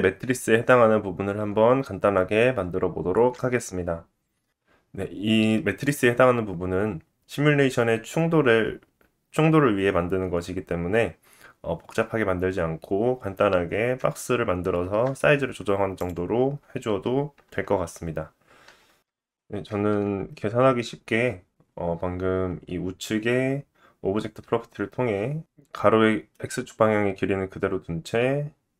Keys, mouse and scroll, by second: 1.5 shift+a, 1.8-13.8 drag, 7.9 middle click, 9.5 s, 12.2 middle click, 13.2 scroll up 2, 13.6 middle click, 16.4 click, 18.0 click, 23.6-26.4 middle drag.